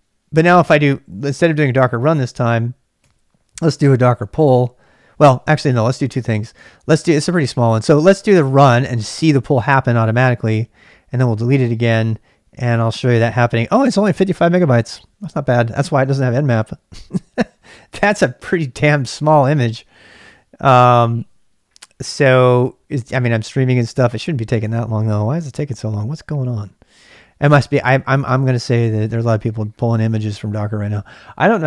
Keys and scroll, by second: 0.7-6.3 typing, 5.3 ctrl+[, 9.1 typing, 10.0 Return.